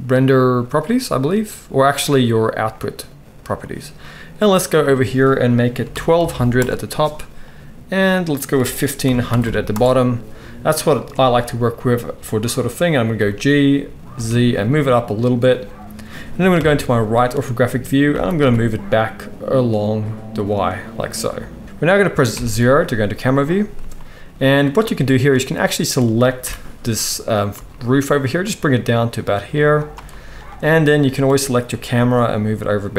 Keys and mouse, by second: 4.9-9.7 drag, 4.9-15.2 middle drag, 6.3 0, 9.4 0, 13.2 g, 15.2-19.1 right drag, 16.5 KP_3, 18.0 g, 19.1-20.3 middle drag, 20.3-21.1 right drag, 21.1-22.3 middle drag, 22.3-32.1 right drag, 22.3 KP_0, 25.2 click, 25.2 middle click, 26.4 g, 31.0 click, 31.0 middle click, 31.9 g, 32.1 middle click, 32.4-32.9 right drag.